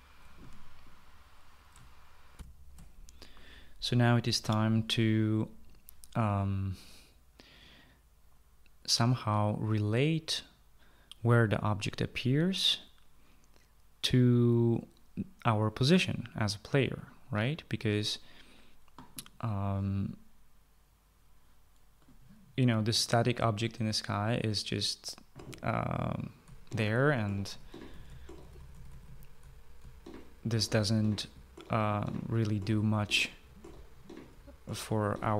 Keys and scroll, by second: 2.9 shift+F9, 3.0 shift+F9, 27.0-35.3 typing.